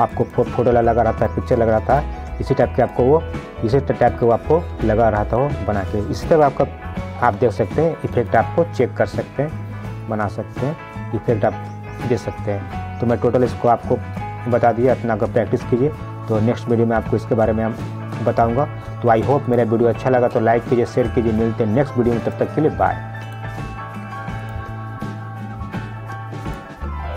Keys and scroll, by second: 7.3 ctrl+z.